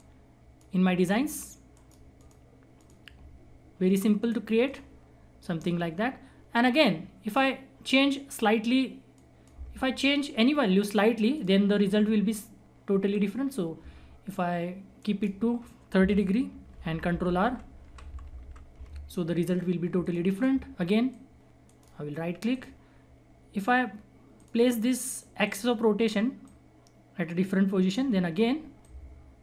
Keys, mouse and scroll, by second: 1.7 right click, 2.1 click, 5.1 scroll up 1, 5.6 scroll down 1, 6.8 click, 6.8 click, 7.6-8.3 scroll up 1, 8.3-9.1 scroll down 1, 9.1 click, 11.9-13.1 scroll up 1, 13.1-15.0 drag, 15.0 ctrl+right click, 16.7 ctrl+r, 18.9-20.0 scroll down 1, 20.0 click, 21.6 right click, 22.0-22.4 scroll up 1, 22.4 click, 22.9-23.6 scroll down 1, 23.6-24.3 scroll up 1, 24.3-29.4 drag.